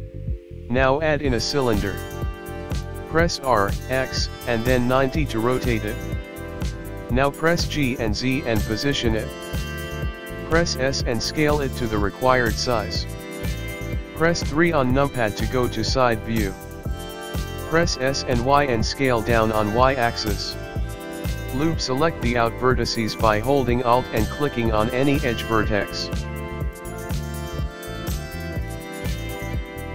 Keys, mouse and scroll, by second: 0.5 click, 1.9 shift+a, 5.5 r, 8.5 g, 12.7 s, 15.0 middle click, 17.0 KP_3, 17.7 s, 21.5 click, 21.6 Tab, 21.6 middle click, 21.6-22.5 scroll down 2, 21.6 KP_1, 23.7 alt+click, 24.9 click, 27.4 click, 28.4 alt+click.